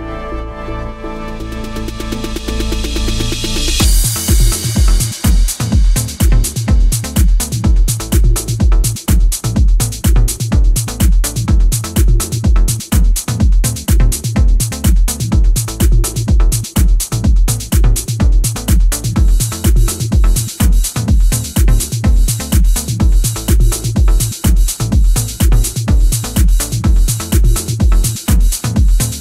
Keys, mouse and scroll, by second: 0.4 click, 1.1 click, 1.8 click, 2.3 click, 2.8 click, 3.2 click, 4.0 click, 4.6 click, 5.1 click, 6.6 click, 7.8 click, 9.6 click, 11.0 middle click, 12.9 click, 14.4-15.0 scroll up 3, 15.0-15.8 scroll down 1, 16.7 click, 18.3 click, 23.8 click, 26.6 middle click, 27.9 click.